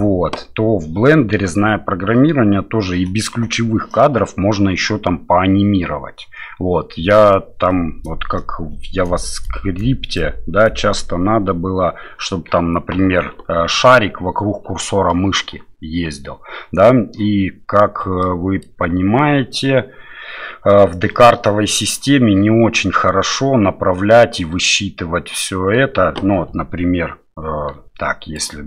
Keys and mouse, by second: 18.2 shift+middle click, 27.7-28.6 d, 28.4-28.6 drag.